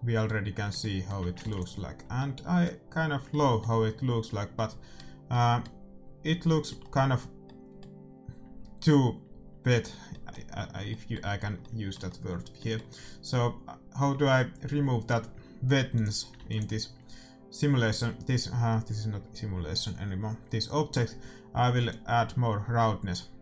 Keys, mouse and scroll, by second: 1.4 ctrl+s, 15.9-18.2 drag, 16.3 ctrl+s, 21.8-23.4 drag.